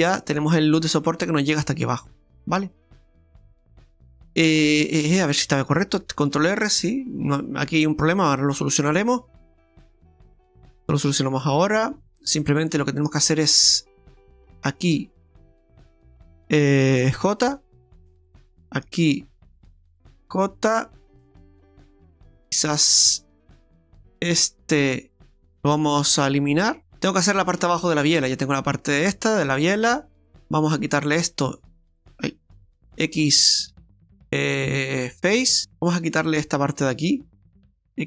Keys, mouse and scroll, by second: 0.1 shift+middle click, 2.6 scroll down 1, 2.8 shift+middle click, 6.4 ctrl+r, 11.5 Tab, 12.0-12.3 scroll up 1, 12.3 Tab, 12.8 shift+middle click, 13.3 scroll up 1, 14.5 click, 15.4 right click, 15.9 shift+right click, 17.2 j, 18.5 right click, 19.0 shift+right click, 20.3 j, 21.6 click, 24.4 click, 24.4 right click, 25.4 shift+right click, 26.6 x, 26.8 shift+middle click, 27.7 shift+middle click, 29.4 right click, 30.7 click, 31.5 right click, 32.6 ctrl+z, 32.8 right click, 33.7 x, 35.6 click, 35.6 right click, 35.8 click, 36.4 right click, 37.0 shift+right click, 37.1 shift+right click, 37.9 x.